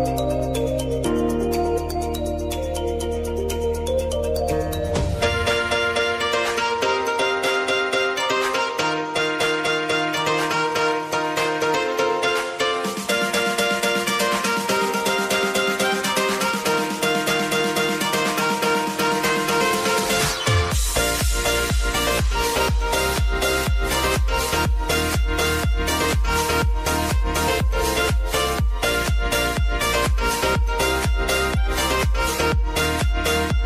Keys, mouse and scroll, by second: 0.5 ctrl+d, 1.6 ctrl+d, 3.7-6.7 shift+drag, 8.9-15.2 drag, 15.2 s, 15.7-25.4 drag, 30.1 s, 30.7-33.6 drag.